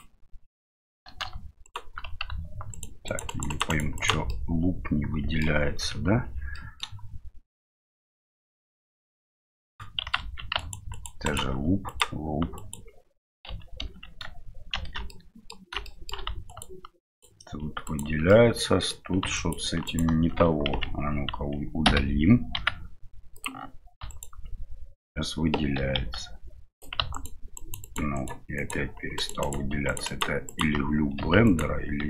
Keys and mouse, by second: 4.4 click, 4.5 middle click, 5.9 KP_Divide, 6.5 middle click, 8.9-10.0 right drag, 10.2 ctrl+z, 10.5 alt+right click, 10.9 right click, 11.2 right click, 11.8 right click, 13.5 a, 14.7 shift+n, 15.1 middle click, 15.8 shift+middle click, 16.5 alt+right click, 17.1 right click, 18.3 middle click, 19.3 alt+right click, 19.8 alt+right click, 25.8 e, 27.1 alt+right click, 27.8 alt+right click, 28.1 alt+right click, 29.1 alt+right click, 29.4 alt+right click, 29.8 alt+right click, 30.4 alt+right click, 31.4 alt+right click.